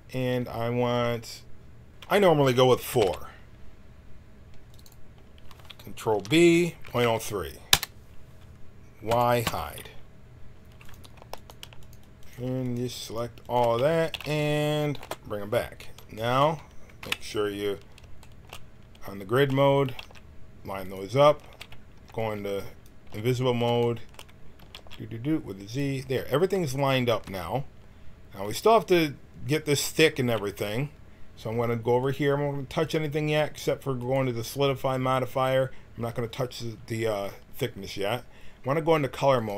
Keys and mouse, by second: 1.9 ctrl+z, 1.9 KP_Decimal, 2.9 ctrl+r, 6.1 ctrl+b, 9.1 y, 9.4 h, 10.8-13.1 drag, 13.1 alt+shift+e, 14.1 x, 15.0 alt+h, 16.9 KP_1, 19.8 g, 21.3 z, 21.9 b, 23.2 z, 24.5 g, 27.1 Tab, 31.9-35.4 drag, 39.3-39.5 drag.